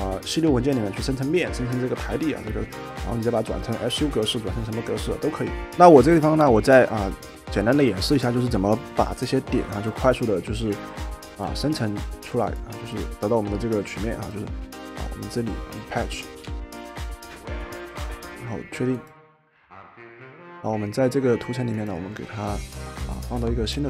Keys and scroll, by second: 16.2-17.2 typing.